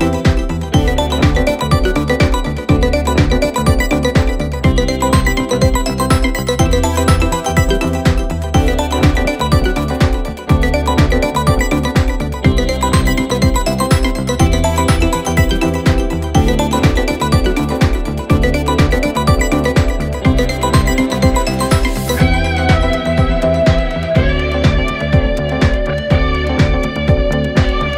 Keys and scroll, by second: 2.6 ], 3.6 4, 5.0 3, 5.6 ctrl+d, 5.6 Escape, 8.0 4, 12.3 3, 18.8 ctrl+d, 19.0 Escape, 23.5 ctrl+z, 24.7 ctrl+z.